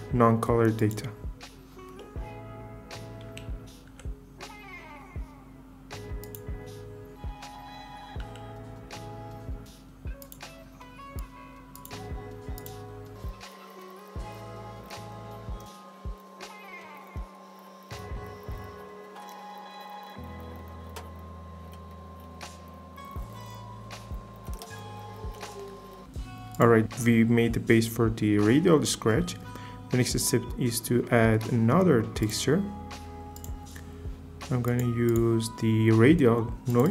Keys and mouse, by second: 3.9 f, 6.2 click, 8.2 f, 10.2 click, 11.1-12.8 drag, 13.1 f, 13.2-14.3 drag, 14.3 click, 15.6 f, 16.9-18.1 drag, 18.6 click, 19.2 f, 20.1 click, 20.8 click, 23.1-24.5 drag, 24.5 shift+f, 24.7 click, 24.9 click, 25.9 click, 33.3 click.